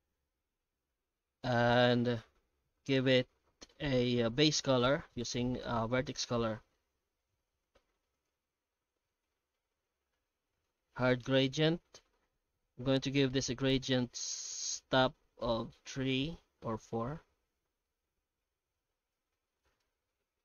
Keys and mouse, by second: 0.1 shift+q, 17.9-19.8 middle drag.